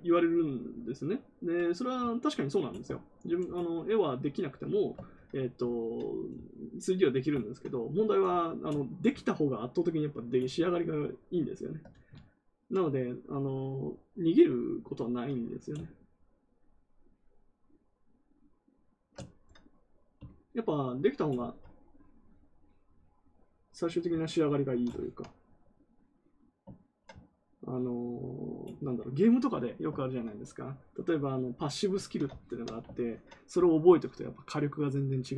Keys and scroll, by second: 11.8 ctrl+z, 29.9 ctrl+z.